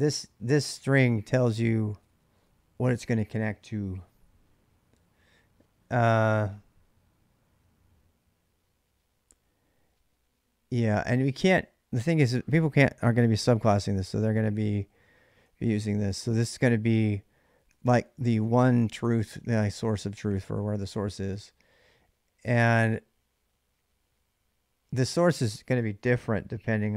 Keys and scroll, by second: 0.0-1.0 typing, 15.2-19.3 typing, 20.4 h, 20.6 h, 21.5 j, 24.7-26.8 typing.